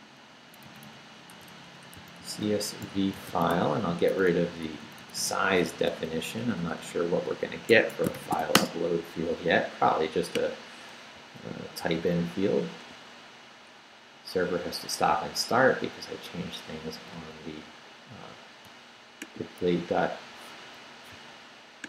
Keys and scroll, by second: 0.7 Right, 1.3-4.0 typing, 4.9 Right, 5.7 BackSpace, 6.8 BackSpace, 7.7 Escape, 8.1 shift+;, 8.4 shift+w, 8.5 Return, 11.8 super+r, 17.1 super+r, 19.6 super+r.